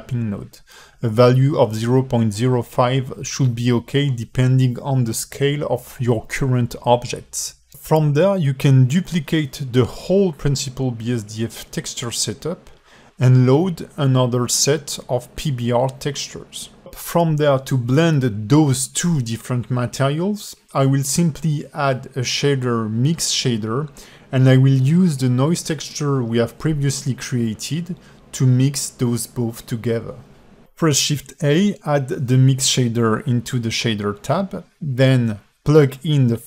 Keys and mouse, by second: 0.2-2.4 drag, 3.6-4.0 alt+shift+middle drag, 5.3 alt+shift+middle click, 6.0-7.0 drag, 7.2 g, 8.1 click, 8.5-8.8 drag, 9.0 g, 11.1 click, 11.3 alt+shift+middle click, 11.9-12.3 drag, 12.4 alt+shift+middle click, 12.8 shift+d, 14.9 g, 15.5 alt+shift+middle click, 16.6 click, 18.5 alt+click, 19.4 a, 19.4 a, 19.8 alt+shift+middle click, 20.2 click, 20.9 middle click, 21.4 ctrl+shift+click, 22.5 alt+shift+middle click, 24.0 drag, 24.6 click, 25.3 shift+a, 32.7 alt+shift+middle click, 33.7-34.8 drag, 35.5 alt+shift+middle click.